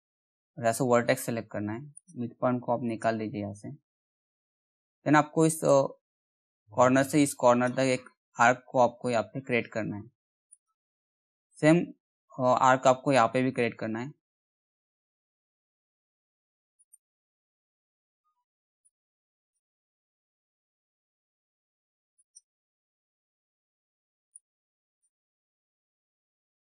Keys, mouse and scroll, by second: 1.5 click, 5.3-9.8 drag, 10.1 click, 10.5-10.9 scroll down 1, 11.0 middle click, 12.7-15.3 drag, 15.3-16.3 scroll up 1, 16.3 click, 16.4 click, 16.9 scroll down 1, 17.0 middle click, 18.5-19.8 drag, 19.8-21.6 scroll up 1, 21.8 click, 22.2-22.6 scroll down 1, 22.6 middle click, 23.1-23.9 scroll up 1, 23.9-26.7 drag.